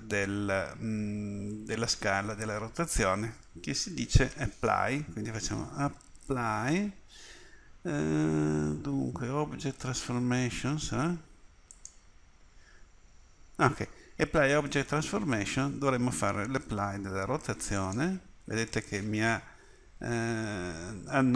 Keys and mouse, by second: 4.2 space, 5.9 p, 17.8-19.3 drag.